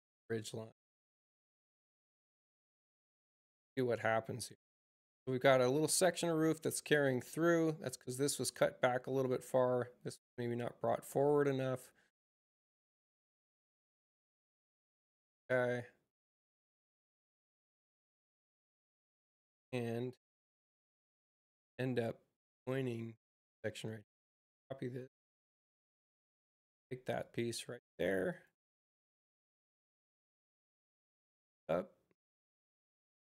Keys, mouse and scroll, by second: 6.1 click, 9.0 click, 12.7 click, 13.6 click, 16.7 click, 24.1 c, 24.9 space, 25.5 click, 27.1 click, 28.2 click, 31.2 space.